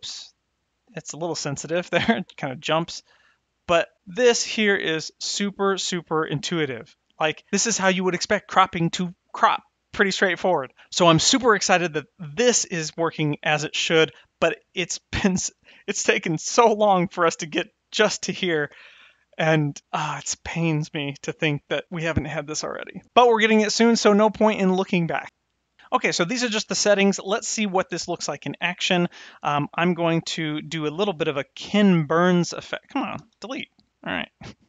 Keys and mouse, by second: 28.6 click, 29.3 x, 30.0 click, 30.2 x, 31.2 click, 31.6 x, 32.7 click, 33.1 x.